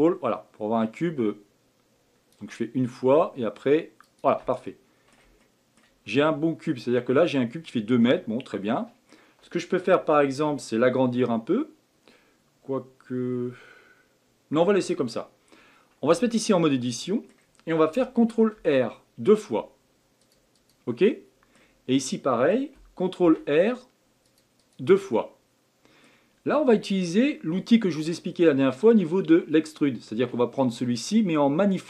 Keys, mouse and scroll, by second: 4.7-6.0 middle drag, 6.0 scroll up 4, 8.0-11.1 middle drag, 16.1 Tab, 16.6-18.5 middle drag, 18.5 ctrl+r, 21.1-23.2 middle drag, 23.2 ctrl+r, 25.1-28.1 middle drag, 30.6-31.8 drag.